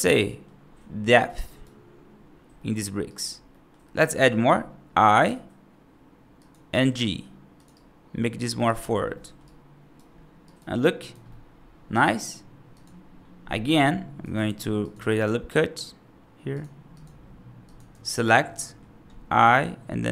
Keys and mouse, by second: 0.1 middle click, 0.9 middle click, 1.3 right click, 2.4 middle click, 3.0 right click, 3.4 middle click, 5.1 i, 6.6 g, 7.6 right click, 9.0 middle click, 9.4 right click, 10.3 right click, 10.9 right click, 11.1 middle click, 13.5 middle click, 14.2 ctrl+r, 16.9 click, 17.6 click, 17.8 3, 18.4 middle click, 19.3 |.